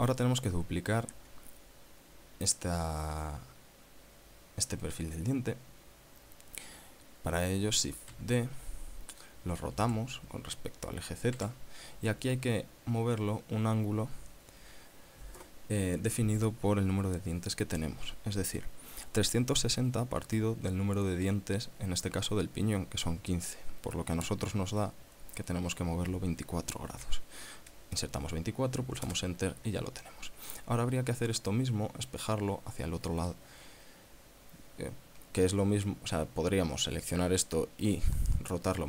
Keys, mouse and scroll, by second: 8.4 shift+d, 10.1 r, 11.7 z, 27.1 2, 29.4 Return.